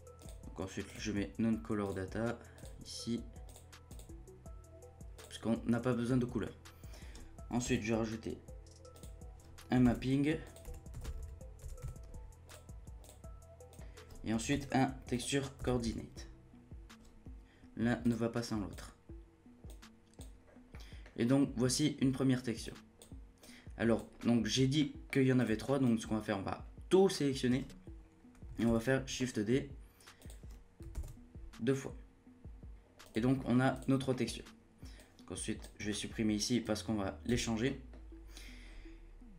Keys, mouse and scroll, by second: 0.2-6.4 drag, 6.4-8.4 middle drag, 8.4-8.9 scroll down 2, 8.9 click, 9.8 shift+a, 11.2 p, 13.7 click, 13.8 middle click, 13.8 scroll down 1, 14.5 shift+a, 16.4 o, 19.6-20.4 drag, 20.4 scroll down 2, 20.7 middle click, 21.1-22.6 scroll down 1, 22.6-23.0 drag, 23.4 click, 24.2 middle click, 24.4 scroll down 1, 24.8-25.4 middle drag, 25.4-28.6 drag, 28.6 shift+d, 30.9 shift+d, 32.7 shift+d, 33.4 middle click, 33.7-34.1 drag, 34.1-35.0 middle drag, 35.0-35.8 drag, 35.8 Delete, 36.6-37.3 drag, 37.3 Delete, 37.6 middle click, 37.9-38.6 scroll up 2.